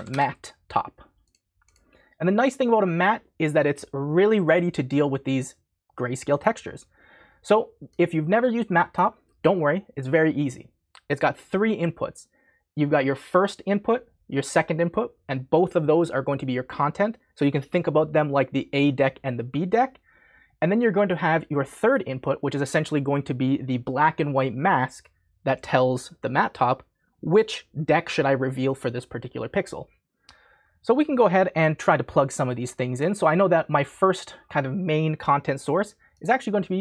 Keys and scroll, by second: 0.0-1.2 typing.